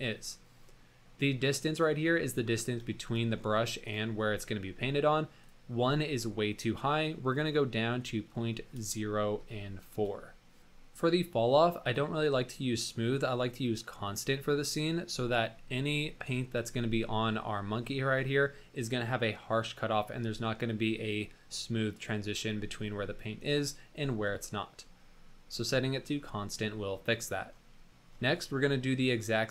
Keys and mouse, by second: 2.2 middle drag, 3.0 shift+click, 3.8 shift+click, 5.4-10.3 drag, 11.9-14.9 drag, 17.5-17.8 middle drag, 23.5 drag, 24.4-24.7 drag, 27.7 drag.